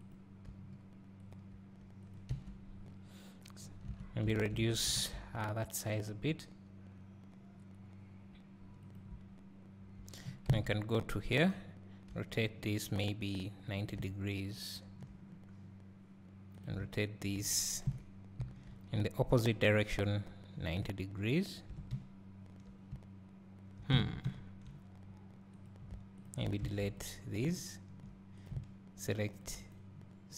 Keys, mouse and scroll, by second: 1.4 click, 1.6 r, 2.3 Tab, 3.9 Tab, 4.2 a, 5.0 alt+s, 9.0 click, 10.5 KP_3, 12.1 r, 15.3 scroll, 16.6-17.8 drag, 17.8 KP_1, 18.4 KP_3, 20.1 r, 21.9 Tab, 24.0 Tab, 25.6 click, 27.0 x, 28.4 click.